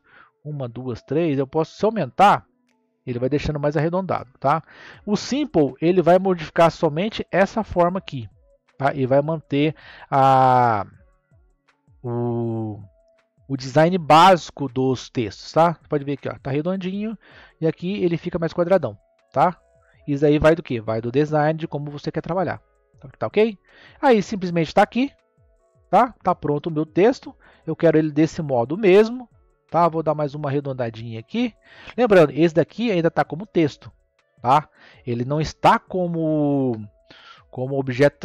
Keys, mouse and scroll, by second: 2.0 click, 5.7-11.0 middle drag, 12.9-15.1 middle drag, 15.1 click, 16.1-18.2 middle drag, 18.2 click, 19.5 click, 21.5 scroll up 1, 22.4-22.9 scroll down 3, 22.9 scroll up 1, 23.6-25.5 middle drag, 25.5 scroll down 3, 26.1-29.1 middle drag, 30.2 click, 31.1-32.5 middle drag, 32.5-34.1 scroll down 2, 34.1-37.1 middle drag.